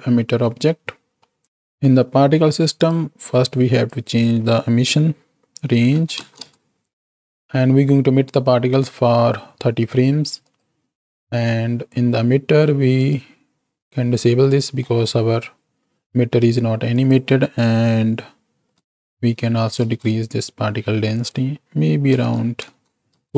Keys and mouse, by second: 1.3 middle click, 2.7 click, 3.6-6.8 drag, 10.4 click, 11.1 click, 13.6 click, 14.6-15.2 middle drag, 16.9-19.9 drag, 21.2-23.1 drag.